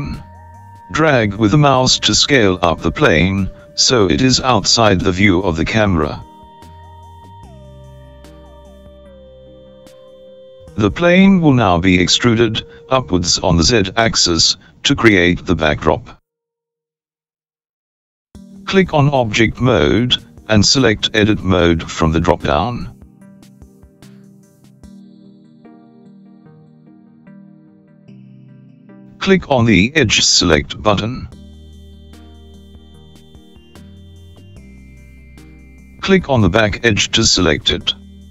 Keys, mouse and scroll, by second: 1.1 g, 20.4-24.1 drag, 33.3 click, 36.4 click.